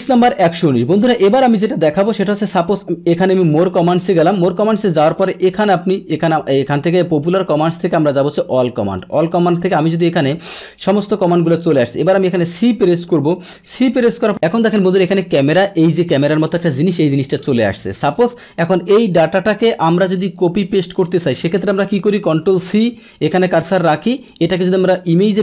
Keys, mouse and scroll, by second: 1.0 click, 3.3 click, 5.5 click, 6.6 click, 8.2 click, 9.2 click, 10.0 click, 18.1 click, 19.0-20.3 drag, 22.3 ctrl+c, 23.0 click, 24.1 click.